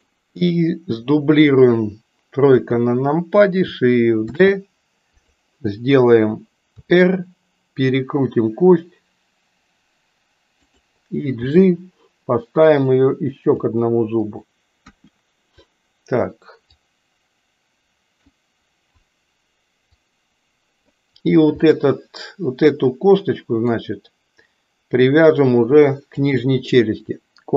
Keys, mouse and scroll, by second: 2.5 KP_3, 4.3 shift+d, 6.7 r, 11.3 g, 14.7 KP_1, 16.7-18.2 drag, 20.0-21.0 drag, 21.6-23.7 middle drag, 26.1 shift+click.